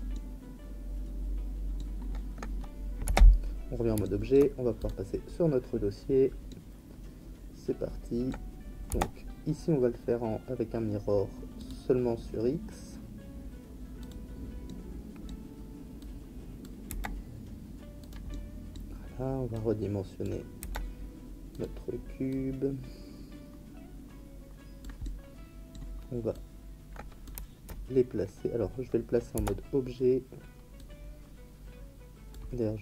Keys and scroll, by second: 3.0 Tab, 8.9 Tab, 16.9 s, 20.6 s, 29.3 Tab.